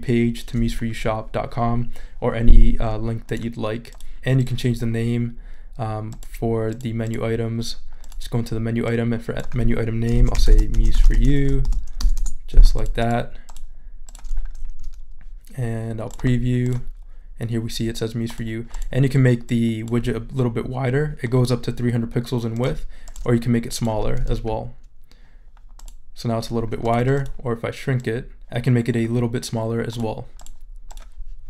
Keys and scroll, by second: 9.9-12.0 typing, 12.2 Return.